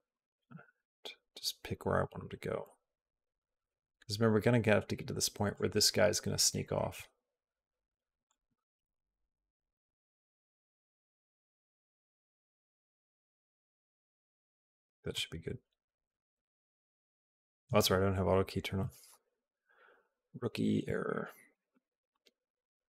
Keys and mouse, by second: 8.0-11.5 drag, 11.8 click, 13.2 click, 15.0-17.6 drag, 19.3 Left, 19.5 Left, 19.6 Left, 19.9 Left, 20.3 Left, 20.7 Down, 21.4 Right.